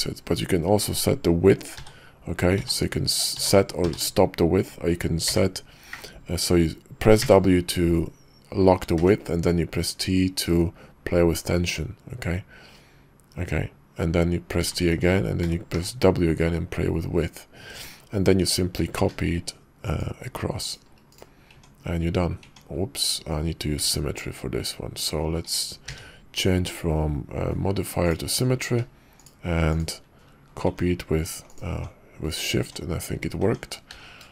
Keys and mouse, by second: 18.2 Tab, 18.8 alt+x, 19.8 shift+middle click, 20.6 shift+middle click, 21.5 Tab, 22.4 Tab, 23.8 alt+x, 29.1 shift+click, 29.7-30.3 shift+drag, 31.5 click, 32.6 Tab, 33.4 Tab, 33.9 alt+x.